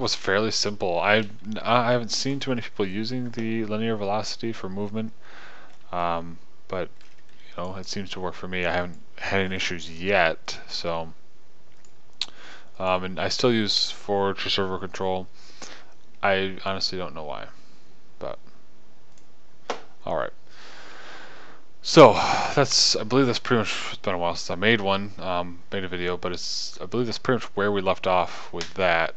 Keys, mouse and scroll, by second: 1.0 KP_0, 6.4-8.2 middle drag.